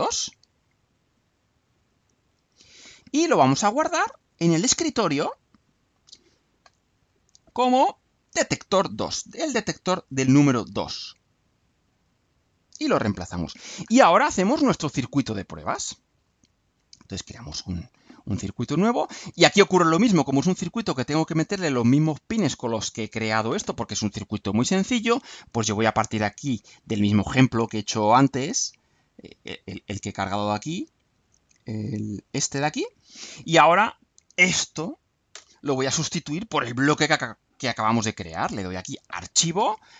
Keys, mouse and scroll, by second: 1.7 click, 4.4 click, 5.6 click, 7.9 click, 9.3-10.1 alt+drag, 10.7 click, 11.9 click, 17.4 click, 19.1-21.7 drag, 32.1 click, 33.7-34.7 drag, 35.3 Delete.